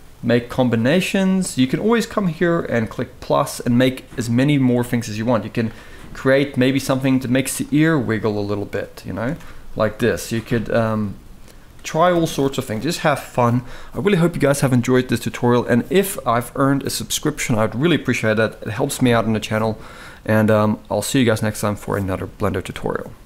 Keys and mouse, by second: 0.6 click, 2.2 click, 5.4 click, 6.5 Tab, 7.9 g, 9.0 Tab, 10.1-11.3 drag, 12.3 click.